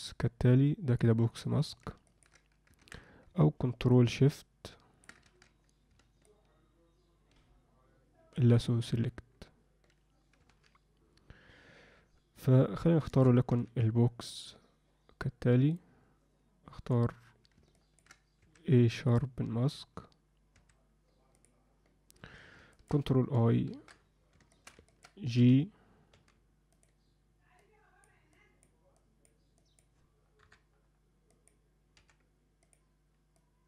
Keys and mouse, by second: 2.1 ctrl+alt+middle click, 2.9 ctrl+z, 4.0-5.1 ctrl+drag, 5.3 ctrl+z, 6.3-8.4 ctrl+shift+drag, 10.5 alt+m, 13.0 alt+shift+middle click, 17.7 ctrl+middle click, 18.4 a, 22.7 ctrl+middle click, 23.8 ctrl+i, 24.5 shift+middle click, 24.9 ctrl+alt+middle click, 25.4 g, 26.1 f, 27.6 click, 28.3 click, 28.9 click, 29.6 click, 30.4 KP_3, 31.3 click, 31.9 f, 33.3 click.